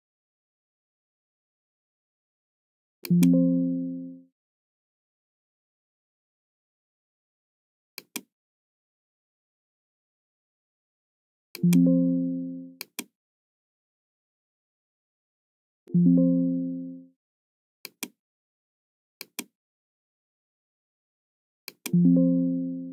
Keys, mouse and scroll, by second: 3.0 click, 7.9 click, 11.5 click, 12.8 click, 15.8 click, 17.7 click, 19.1 click, 21.6 click.